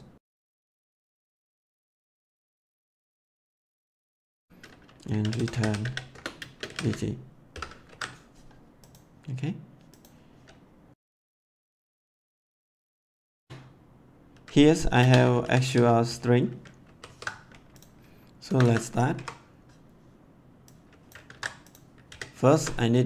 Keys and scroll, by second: 0.0-3.7 typing, 0.3 Return, 4.0 Return, 4.9-7.5 typing, 7.9 ctrl+s, 11.4-13.2 typing, 13.3 Return, 14.9-16.5 typing, 16.8 ctrl+s, 18.4 Return, 19.1 Up, 21.2 ctrl+c, 22.0 ctrl+v, 22.3 ctrl+s.